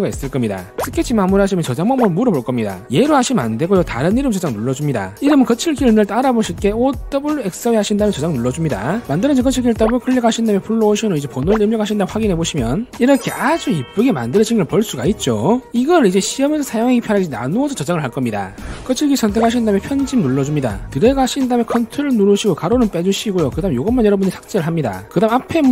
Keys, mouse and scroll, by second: 1.6 click, 5.0 click, 8.9 click, 10.3 click, 10.5 click, 11.2 click, 12.2 1, 12.8 click, 20.0 click, 20.1 right click, 20.9 click, 21.1 click, 23.6 ctrl+click.